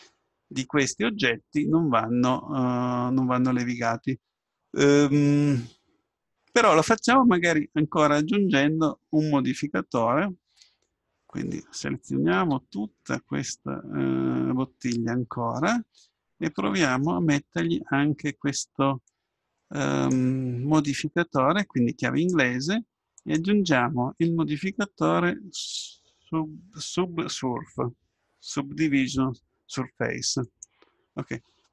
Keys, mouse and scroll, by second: 12.4 Tab, 14.9 middle click, 16.3-18.3 middle drag, 22.1-25.1 drag.